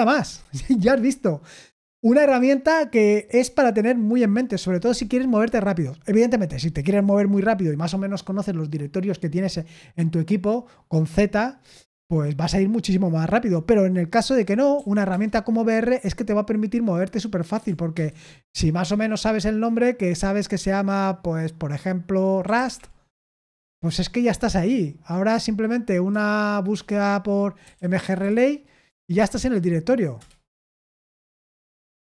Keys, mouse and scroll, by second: 14.4-14.7 typing, 15.0 Return, 17.9 shift+/, 22.1-23.1 typing, 23.5 Return, 26.7-28.7 typing, 28.8 Return, 30.1 Return, 30.6 Return, 31.3 Escape, 31.6 Escape, 31.9 Escape.